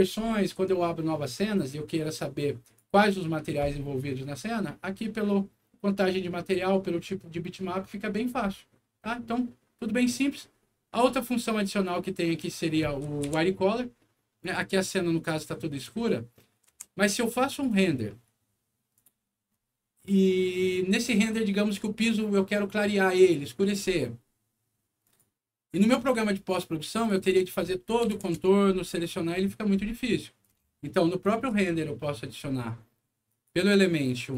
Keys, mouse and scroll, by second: 2.6 click, 10.0 click, 10.4 scroll down 2, 10.9 scroll up 2, 11.2 middle click, 12.8 middle click, 13.2 F4, 13.7 scroll down 1, 14.7 middle click, 16.3 middle click, 16.6 c, 17.4 click, 17.6 click, 18.9 click, 25.0 click, 25.9 click, 26.9 click, 27.1 click, 28.0 KP_4, 28.3 Return, 30.3 click, 31.1 middle click, 31.4 F10, 33.2 click, 34.2 click.